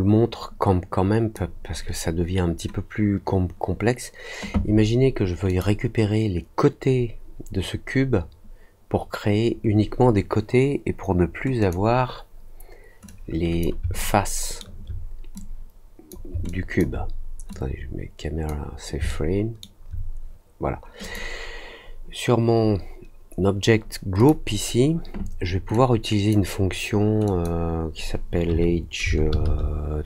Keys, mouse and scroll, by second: 5.4 click, 11.5 click, 13.0 click, 13.9 alt+middle click, 15.3 click, 16.4 alt+click, 17.4 click, 19.0 alt+middle click, 21.0 click, 24.1 click, 25.7 click, 27.2 click.